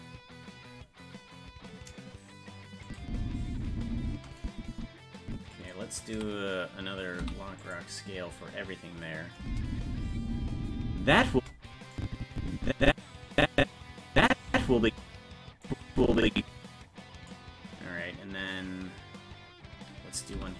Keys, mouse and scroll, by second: 2.9 click, 3.0 space, 4.4-5.7 drag, 6.1 a, 7.2 i, 9.4 space, 11.9-14.3 drag, 14.5 space, 15.6-17.3 drag, 20.3 i.